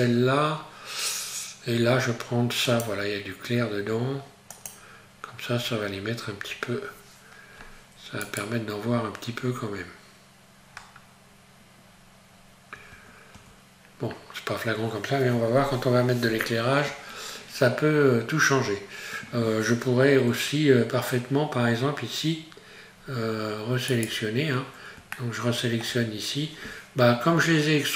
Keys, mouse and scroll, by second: 5.6-6.4 scroll down 1, 8.3 right click, 8.9-9.5 scroll up 1, 10.7-11.3 scroll down 1, 12.3 scroll up 1, 12.9 Tab, 13.4 Tab, 18.5 scroll up 1, 23.9 right click, 27.3-27.9 scroll up 1.